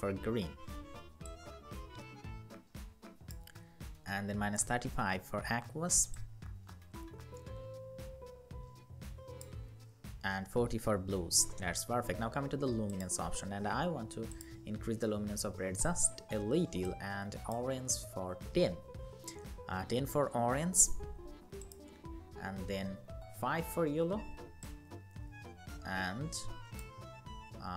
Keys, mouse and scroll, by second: 9.3 Up, 9.5 Up, 14.6 Up, 15.7 Up, 17.3 Up, 17.7 Up, 18.2 Up, 21.7 Up, 21.9 Up, 22.1 Up, 22.3 Up, 22.7 Up, 26.7 Up, 27.2 Up.